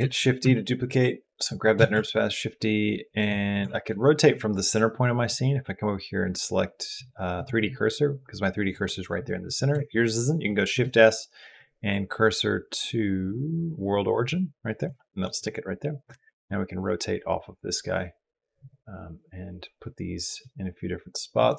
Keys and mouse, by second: 0.2 Escape, 1.7 shift+d, 5.1-7.3 drag, 10.5 shift+s, 15.9 r, 21.5 shift+click.